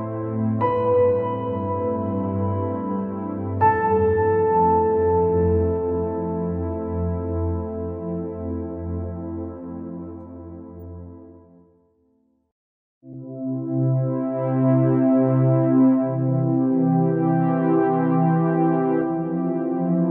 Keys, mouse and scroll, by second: 0.0 g, 2.8 KP_0, 3.9 KP_0, 4.5 KP_0, 6.0 click, 7.3 g, 11.4 KP_0, 13.1-14.7 drag, 14.8 scroll down 3, 15.3-15.8 scroll up 7, 15.8 scroll down 2, 16.0-18.4 middle drag, 18.4-18.7 scroll down 5, 19.0 middle click, 19.3 scroll up 2.